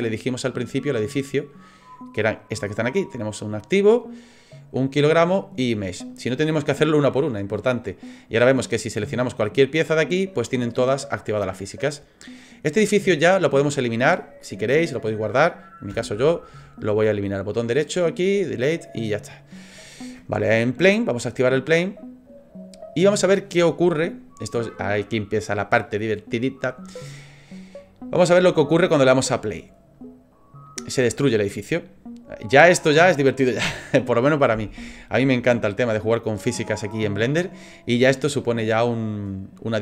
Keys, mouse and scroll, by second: 1.9 right click, 8.6 right click, 15.9 Delete, 17.3 right click, 22.0 click, 29.9 click, 35.2 click, 36.4 click, 37.6 middle click.